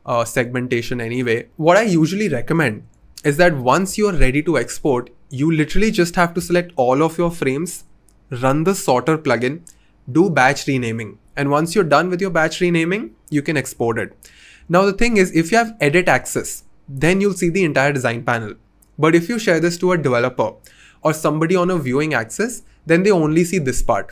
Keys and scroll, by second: 6.4 BackSpace.